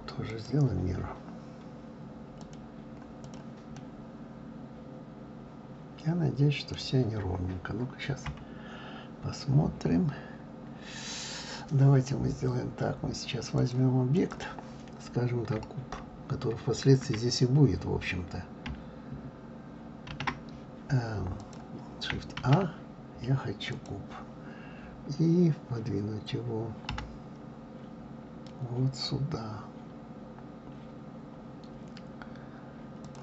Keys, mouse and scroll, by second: 0.3-3.3 drag, 3.7-6.8 middle drag, 8.2 KP_3, 9.9-10.5 scroll up 1, 10.5-12.5 scroll down 2, 13.6-16.6 drag, 20.1 shift+a, 21.4 click, 22.4 shift+a, 26.9 g.